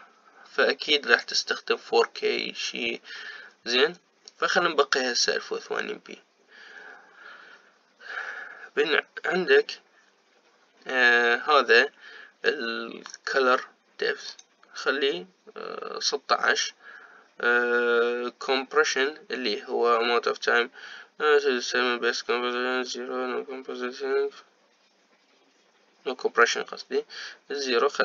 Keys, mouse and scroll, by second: 8.0-9.3 scroll down 2, 9.3-10.2 scroll down 3, 10.2-12.0 scroll down 1, 12.0-13.2 scroll down 1, 15.5-18.3 drag, 27.7-28.0 drag.